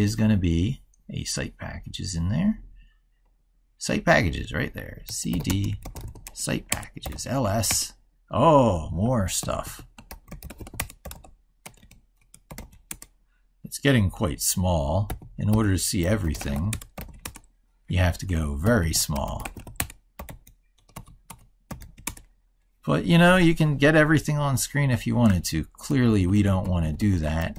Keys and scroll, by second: 9.3 ctrl+-, 15.1 ctrl+-, 25.9 ctrl+=.